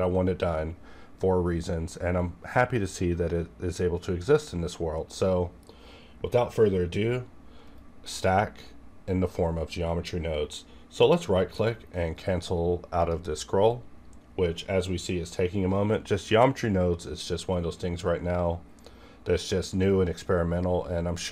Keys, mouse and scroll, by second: 7.6 right click, 7.7-13.0 right drag, 13.0 click, 13.0-21.3 drag.